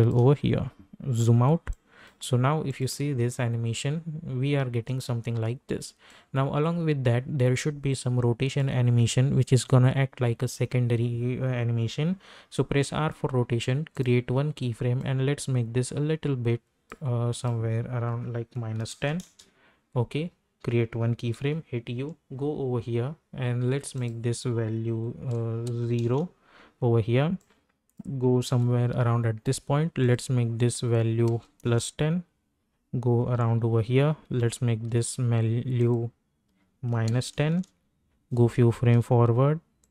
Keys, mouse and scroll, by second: 1.1 -, 1.3 -, 1.7 click, 3.0 space, 6.1-11.1 drag, 12.3 r, 13.9-17.3 drag, 19.2 Return, 21.4-21.9 typing, 23.9 click, 26.0 Return, 27.4 click, 28.4 k, 30.0 click, 31.6 Return, 33.2 k, 35.8 click, 37.4 Return, 38.3 space, 39.8-39.9 drag.